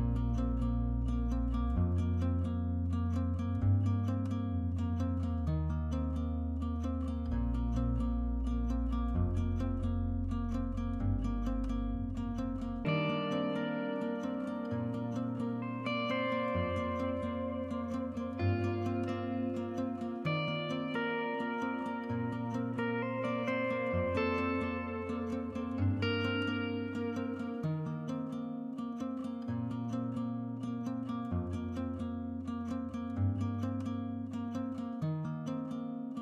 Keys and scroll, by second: 13.1 5, 18.3-21.7 Escape.